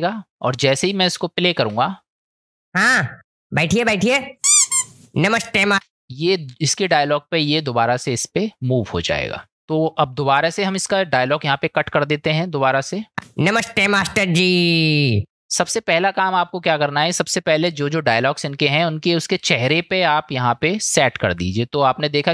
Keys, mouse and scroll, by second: 1.6 space, 5.7 space, 11.5 click, 13.2 space.